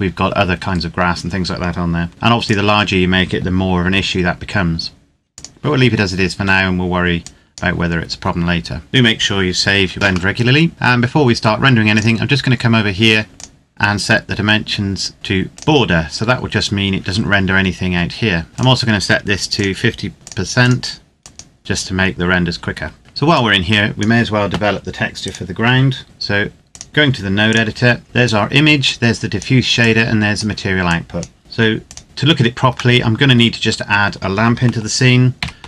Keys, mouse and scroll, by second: 2.1 s, 2.2 click, 3.6 g, 5.0 click, 6.1 Tab, 6.9 click, 7.8-8.9 scroll down 1, 8.9 click, 10.3 shift+middle click, 11.7 click, 15.3 click, 18.5 click, 21.6 KP_Enter, 23.1 click, 25.0 right click, 25.9 scroll up 1, 26.0 shift+middle click, 26.5 click, 28.0 scroll up 1, 28.0 click, 31.7 click, 32.0-32.9 scroll down 1, 32.9 middle click, 33.3 scroll down 1, 35.4 shift+a.